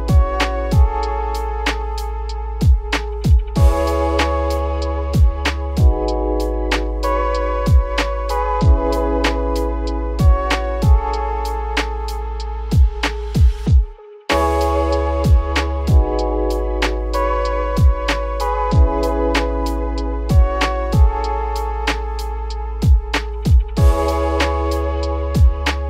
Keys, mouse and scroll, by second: 2.2 click, 2.9-4.6 drag, 4.6-4.9 scroll down 6, 4.9-5.3 middle drag, 5.4-5.7 scroll down 2, 5.7 ctrl+s, 6.3-9.4 scroll up 6, 10.5 click, 12.0 click, 13.1 click, 13.9 shift+click, 14.4 shift+click, 15.5 shift+click, 16.7 ctrl+l, 19.3 scroll down 3, 19.6-21.2 middle drag, 21.2-21.6 scroll up 2, 21.6-21.9 middle drag, 21.9 ctrl+s, 22.2 click, 22.5 scroll down 2, 22.5-25.6 middle drag.